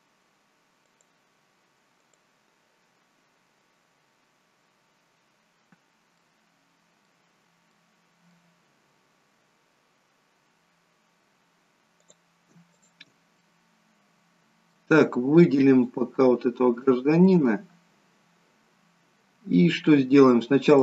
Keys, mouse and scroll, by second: 0.8 click, 2.1 click, 6.1 middle click, 7.7 middle click, 12.1 click, 12.7 shift+click, 13.4 middle click, 15.8 click, 17.2 middle click, 20.6 click.